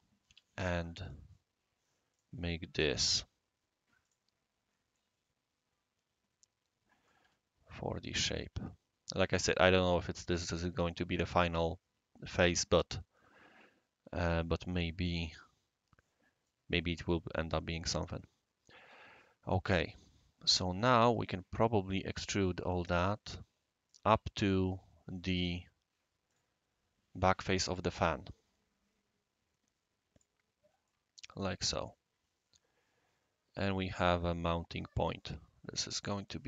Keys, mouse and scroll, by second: 0.0-0.2 typing, 1.0 click, 2.1 click, 3.1 click, 4.0 click, 4.6 scroll down 1, 4.9-7.1 right drag, 7.1 typing, 8.1 click, 9.3 click, 11.1-18.8 right drag, 11.7-18.8 middle drag, 18.8-20.2 middle drag, 18.8-21.1 right drag, 22.1 click, 23.8 click, 24.6 click, 26.3 click, 30.1 click, 30.9-35.8 right drag, 36.0-36.4 middle drag.